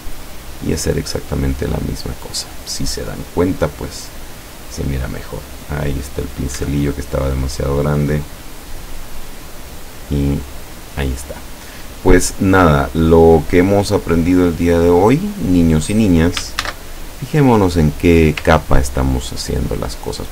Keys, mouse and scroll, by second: 0.3 click, 1.5 click, 4.0 click, 5.6 click, 6.6 Escape, 7.6-8.9 drag, 10.5 click, 12.6 click, 13.4 click, 14.3 click, 16.6 ctrl+shift+a, 18.7-19.4 ctrl+scroll down 2.